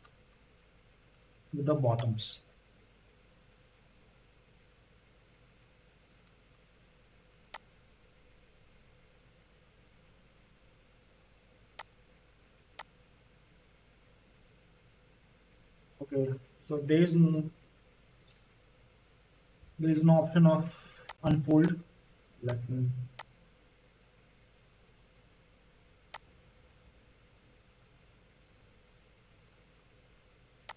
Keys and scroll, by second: 11.5 z, 30.1 q.